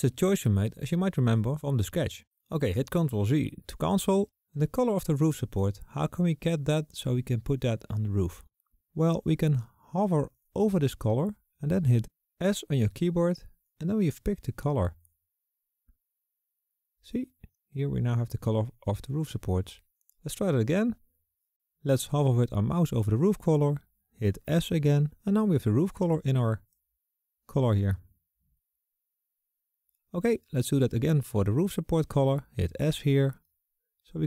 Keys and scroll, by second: 1.1 z, 12.4 s, 24.5 s, 31.5 s.